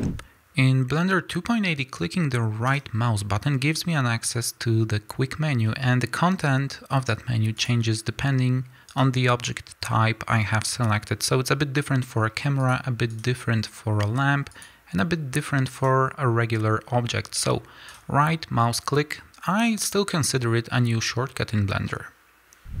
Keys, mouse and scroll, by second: 0.0 click, 2.7-7.6 right drag, 7.6 click, 8.9-12.6 right drag, 12.6 click, 13.1-14.5 right drag, 14.5 click, 15.7-22.8 right drag.